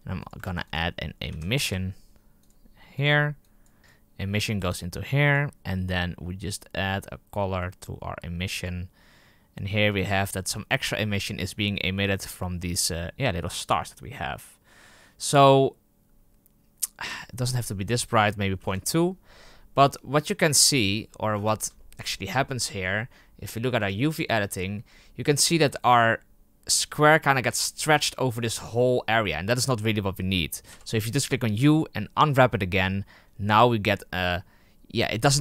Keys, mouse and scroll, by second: 0.1 click, 3.4 click, 5.3 click, 8.6 click, 18.6-20.5 drag, 20.5-21.2 middle drag, 21.7-23.8 shift+middle drag, 23.8 click, 25.4-26.3 scroll down 1, 26.3-28.3 scroll down 1, 28.3-31.5 scroll down 1, 31.5 u.